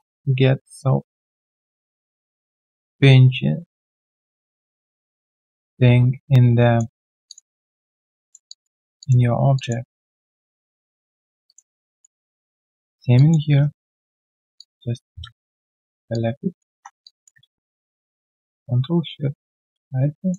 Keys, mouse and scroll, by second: 6.9 alt+middle click, 7.5 alt+scroll down 1, 7.8 alt+click, 8.4 alt+click, 9.8 alt+middle click, 10.2 alt+click, 10.5 alt+right click, 10.6 alt+click, 10.9 alt+middle click, 11.4 alt+click, 11.6 alt+right click, 11.9 alt+click, 12.2 alt+middle click, 12.4 alt+click, 12.7 alt+middle click, 13.1 alt+click, 13.6 right click, 15.5 shift+click, 15.7 shift+double click, 16.1 alt+double click, 17.0 w, 17.9 ctrl+shift+click.